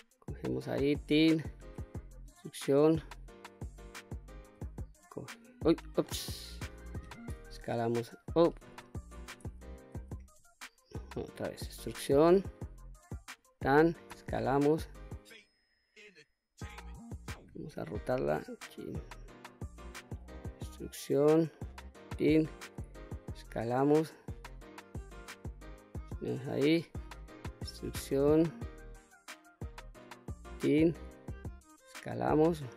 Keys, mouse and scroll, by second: 0.4 click, 1.2 e, 2.8 click, 4.0 e, 5.4 right click, 6.8 s, 7.9 click, 8.6 ctrl+z, 8.8 ctrl+z, 9.4 ctrl+z, 11.1 e, 12.7 click, 13.6 s, 16.3 click, 17.2 r, 18.8 click, 19.6 e, 21.3 click, 22.2 s, 25.6 click, 26.5 e, 29.7 click, 30.5 s, 32.3 click.